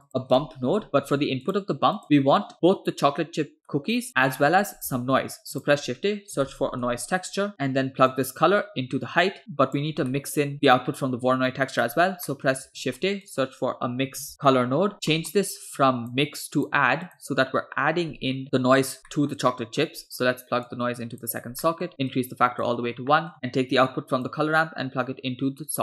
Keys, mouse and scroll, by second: 2.0 scroll down 2, 2.1 middle drag, 2.5 click, 2.5 scroll up 2, 2.6 click, 4.3 middle click, 4.6 scroll up 2, 5.0 shift+a, 7.5 middle click, 8.1-9.8 drag, 10.1-10.7 middle drag, 11.5 middle click, 12.3 middle click, 12.7 shift+a, 15.2 middle click, 15.8 click, 16.6 click, 17.1-18.4 drag, 19.1 middle click, 19.6 middle click, 20.7-21.4 drag, 21.6 middle drag, 22.2 click, 22.9 scroll down 2, 23.2 middle click, 24.3-25.8 drag.